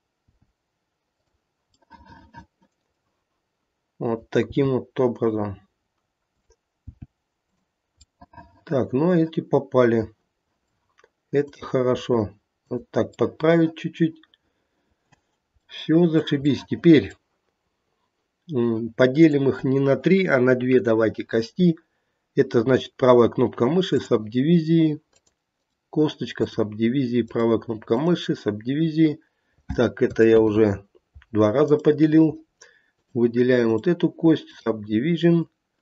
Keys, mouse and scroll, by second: 0.2 g, 2.1 middle click, 4.0 click, 4.5 g, 6.2 click, 6.8 g, 8.1 middle click, 11.4 click, 11.9 g, 13.2 middle click, 13.8 middle click, 14.0 middle click, 15.0 middle click, 15.8 middle click, 17.0 middle click, 17.8 scroll up 1, 19.1 click, 22.6 right click, 25.1 click, 25.6 right click, 27.3 right click, 31.5 right click, 32.8 click, 33.6 right click, 35.3 click, 35.7 right click.